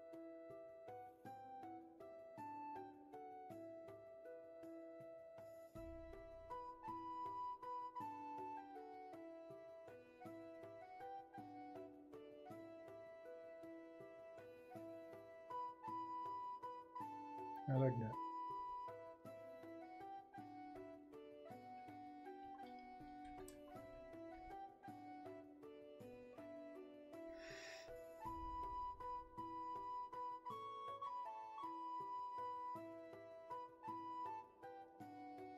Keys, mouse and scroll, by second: 1.5 ctrl+z, 7.5 space.